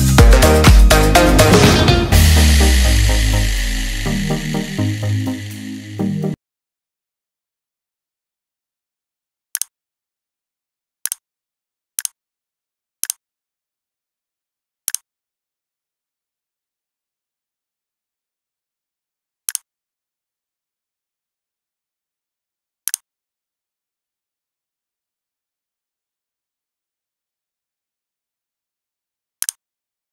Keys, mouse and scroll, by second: 0.0 click, 3.0 click, 4.8 click.